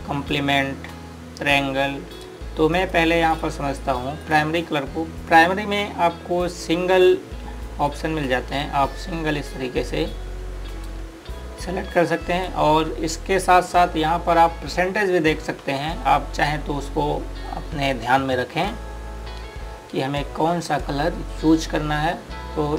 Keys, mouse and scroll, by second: 3.5 click, 8.7 click, 20.8 click.